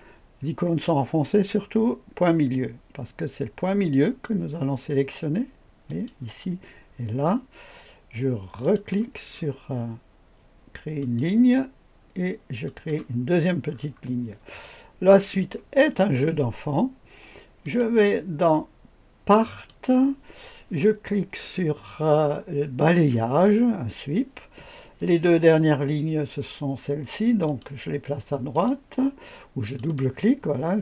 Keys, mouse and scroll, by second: 4.0 click, 5.8 click, 8.6 click, 9.3-11.0 scroll up 2, 11.0 click, 12.6 click, 13.1 click, 13.2-14.6 scroll down 4, 14.6-16.0 drag, 17.6 click, 19.5 click, 22.9 click, 27.4 click, 28.5 click, 29.7 click, 29.9 click.